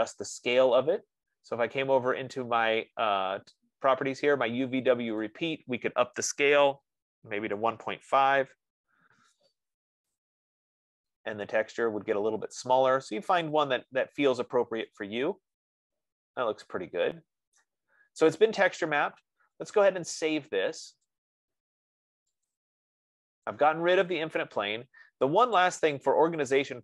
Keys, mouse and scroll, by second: 1.2 click, 5.7 click, 6.9 click, 7.8-9.0 typing, 10.5 click, 11.1-12.1 scroll, 12.2-12.6 scroll, 12.7-13.0 scroll, 13.7-15.0 scroll, 17.9 right click, 18.1 scroll, 21.4 click, 23.0 click, 25.9 click.